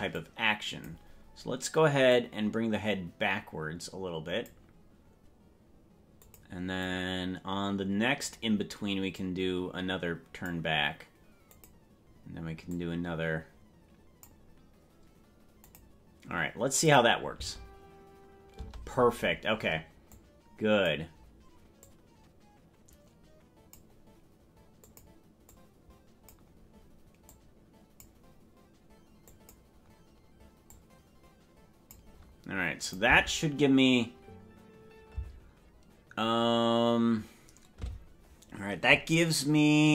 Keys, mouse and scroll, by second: 0.2 click, 2.1-4.5 drag, 6.3 click, 6.9-8.3 drag, 9.1-10.5 drag, 11.5 click, 12.7-14.3 drag, 15.7 click, 16.9 click, 17.4 space, 18.8 space, 20.2 click, 21.8-23.8 drag, 24.8 click, 25.5 click, 27.3 click, 29.3 click, 30.7-32.0 drag, 32.9 click, 33.2 space, 35.4 space.